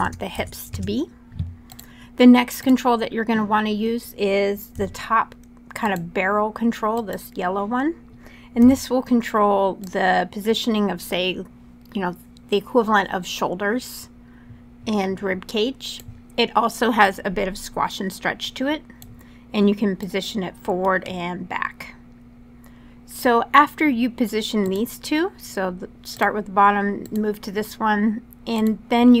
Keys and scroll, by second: 0.1 Tab, 0.5 Return, 4.5 q, 8.3 w.